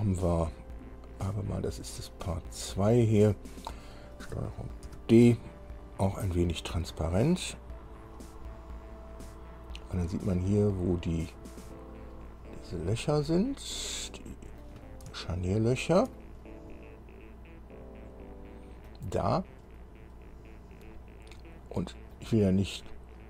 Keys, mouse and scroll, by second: 2.6 click, 5.1 ctrl+d, 7.2-10.4 drag, 10.6-10.9 scroll up 1, 11.6 scroll up 1, 12.5-12.9 scroll down 1, 13.6-15.0 middle drag, 15.4-16.6 shift+middle drag, 16.9-19.3 middle drag, 19.9-22.5 middle drag.